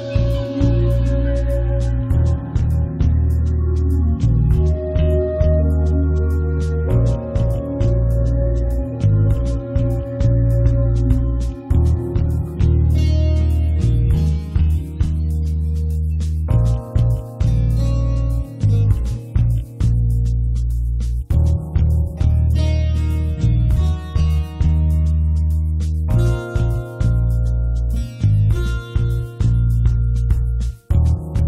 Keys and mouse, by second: 0.3 click, 0.9 s, 1.3 z, 1.5 Tab, 2.1 click, 2.5 s, 3.1 click, 3.6 middle click, 4.3 s, 4.8 click, 5.5 middle click, 5.7 click, 5.7 right click, 6.7 KP_7, 7.2 KP_Divide, 7.8-9.2 right drag, 8.7 v, 9.8 c, 11.3 p, 11.6 Tab, 11.8 Tab, 12.0 z, 12.3-13.6 right drag, 12.5 Tab, 13.3 x, 13.7 right click, 14.7 click, 15.4 click, 15.9-18.8 typing, 16.0 KP_Divide, 16.7 Tab, 19.0 click, 20.0 r, 20.5 g, 21.3 Tab, 21.5 click, 21.7 Tab, 21.8 middle click, 21.8 right click, 22.1 s, 22.2 right click, 22.6 ctrl+r, 22.9 s, 23.8 Tab, 24.2 Tab, 24.3 Tab, 24.5 Tab, 24.6 click, 24.8 s, 25.1 Tab, 25.4 click, 26.1 click, 26.7 middle click, 26.7 right click, 26.9 click, 26.9 right click, 28.3 click, 29.7 middle click, 30.0 s, 30.6 right click.